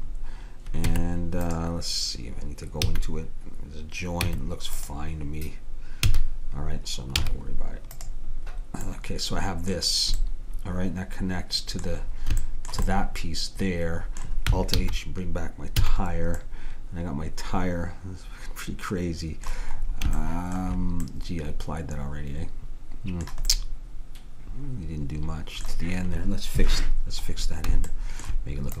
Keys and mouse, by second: 1.0 Tab, 3.0 a, 4.3 Tab, 6.2 a, 7.2 z, 10.4 click, 10.6 click, 10.9-12.1 middle drag, 12.6 middle click, 14.8 alt+h, 15.8 a, 16.5-18.2 middle drag, 19.8-22.6 middle drag, 23.6 click, 23.7-25.3 middle drag, 23.8 click, 24.0 click, 28.0-28.8 middle drag.